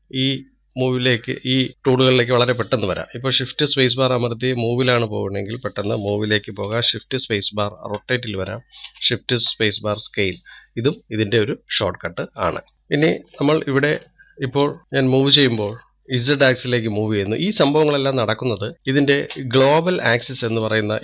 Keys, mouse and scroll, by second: 8.2 shift+space, 10.2 shift+space, 12.7 n, 13.3 scroll up 2, 14.2-15.2 shift+middle drag, 15.2-15.9 drag, 15.9-17.5 shift+middle drag, 17.5 click, 18.7-21.0 middle drag.